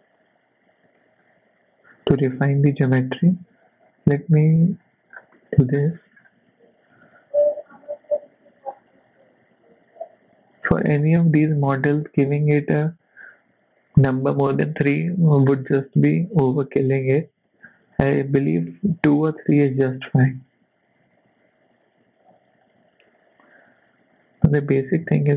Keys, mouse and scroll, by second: 0.9 ctrl+r, 4.7 click, 5.1 scroll down 4, 5.3 middle click, 5.7-6.8 scroll up 5, 6.0 shift+middle click, 6.9 ctrl+r, 11.0-11.4 scroll down 2, 11.4 middle click, 15.3 scroll up 4, 16.0 middle click, 17.5 ctrl+r, 21.1 ctrl+r, 25.0 z.